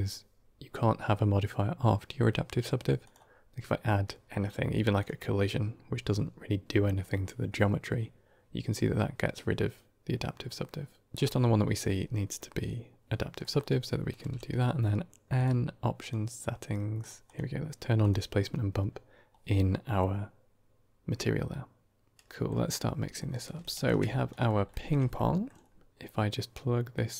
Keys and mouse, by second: 2.9-4.9 drag, 11.1 click, 11.1 x, 13.3 middle click, 14.1 n, 15.9 click, 16.9 click, 17.1-18.0 drag, 22.1 middle drag, 22.1 n, 23.2 middle click, 23.6 ctrl+shift+click, 24.2 middle drag, 24.6 shift+middle drag, 25.0-25.3 middle drag, 26.9-27.1 drag.